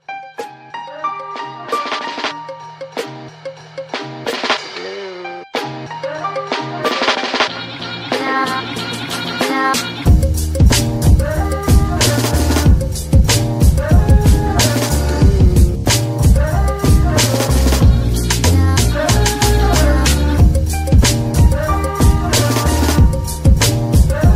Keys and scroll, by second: 1.1 g, 13.6 z, 23.2 Escape.